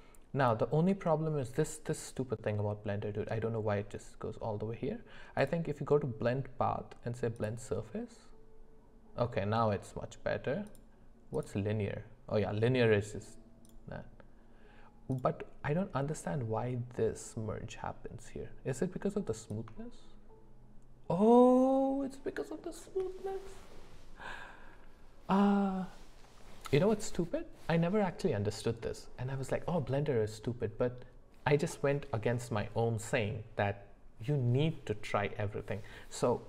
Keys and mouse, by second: 5.4-7.4 drag, 10.7 click, 13.7-15.2 drag, 19.6-22.8 shift+drag.